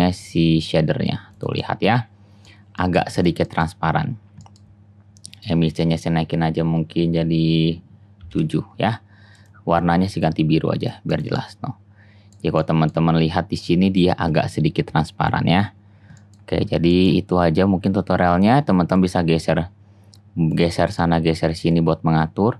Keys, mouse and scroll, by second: 1.4-4.6 middle drag, 13.1 click, 13.3-15.3 middle drag, 15.3-16.5 drag, 17.5-18.0 middle drag, 19.0-22.5 drag.